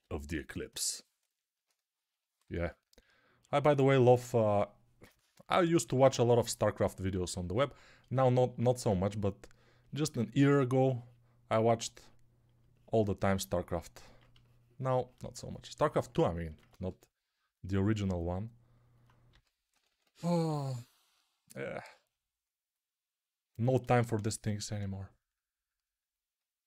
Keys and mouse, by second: 16.7 g, 19.2-20.4 typing.